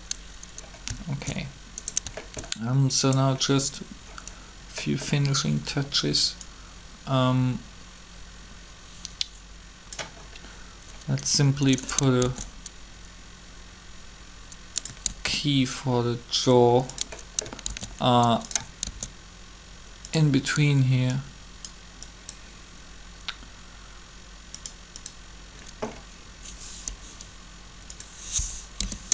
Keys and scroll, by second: 12.2 shift+d, 15.1 shift+d, 17.7 shift+d, 18.8 shift+d, 28.7 0, 28.8 Return.